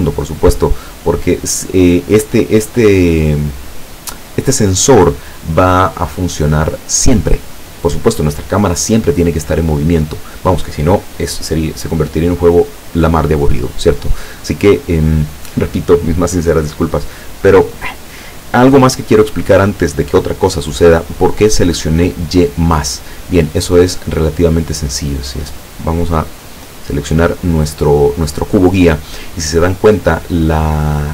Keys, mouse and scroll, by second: 19.4 click, 23.2-24.9 middle drag, 25.1 scroll up 1, 26.4 right click.